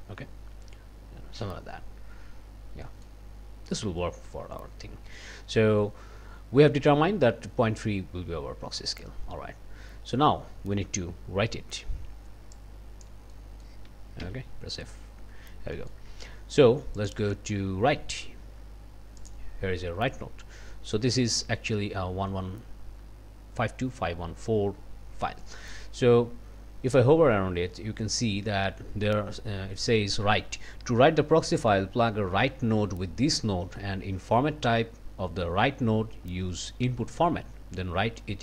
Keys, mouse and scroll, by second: 0.8 scroll up 2, 2.0-2.7 scroll down 2, 2.8 middle click, 3.6 scroll up 2, 12.5 click, 13.3 click, 14.2 f, 15.7 click, 17.0 click, 19.2 click.